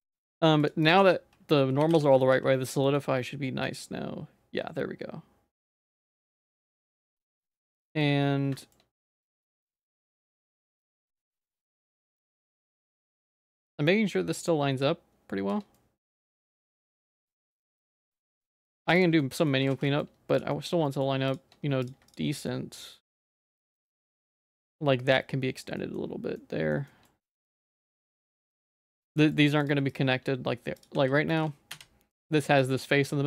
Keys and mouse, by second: 0.1 ctrl+s, 0.7-2.4 drag, 2.9 middle click, 3.8-6.1 drag, 6.4 middle click, 6.9 shift+middle click, 7.3 middle click, 8.6 shift+middle click, 9.1 click, 9.3 Tab, 9.6 middle click, 9.8 Tab, 10.1 middle click, 10.3 shift+middle click, 10.8 ctrl+s, 11.2 shift+middle click, 11.7 middle click, 12.0 shift+middle click, 12.5 click, 13.9-15.5 drag, 15.8 middle click, 16.4 shift+middle click, 16.9 middle click, 17.3 shift+middle click, 17.7 middle click, 18.0 shift+middle click, 18.7 middle click, 19.3 middle click, 19.7 ctrl+s, 19.9 middle click, 20.5 middle click, 20.9 middle click, 21.9 click, 22.1 click, 22.5 shift+middle click, 23.3 ctrl+s, 23.4 middle click, 23.7 middle click, 24.3 middle click, 25.8 middle click, 26.4 middle click, 26.9 shift+middle click, 27.4 middle click, 27.7 shift+middle click, 28.3 ctrl+s, 28.5 middle click, 29.2 middle click, 29.9 click, 30.9 g, 31.7 /, 32.1 middle click.